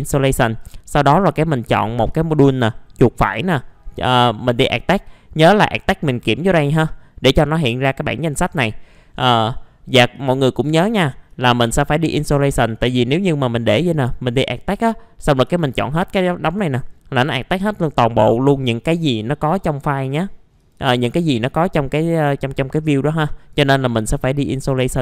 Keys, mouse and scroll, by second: 2.1 right click, 3.4 click, 10.9-11.3 scroll down 1, 11.3 right click, 12.2 click, 12.6 middle click, 13.0 right click, 14.4 click, 15.6 ctrl+a, 20.1-22.6 drag, 23.5 right click, 24.4 click.